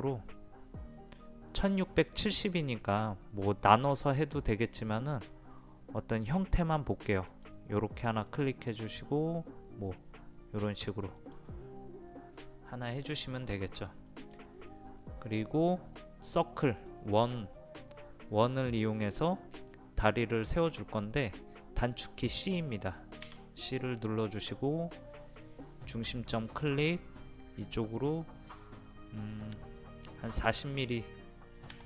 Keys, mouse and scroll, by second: 13.3 middle click, 14.9 scroll up 1, 20.4 middle click, 23.3 c, 26.1-27.3 drag, 31.7 KP_4.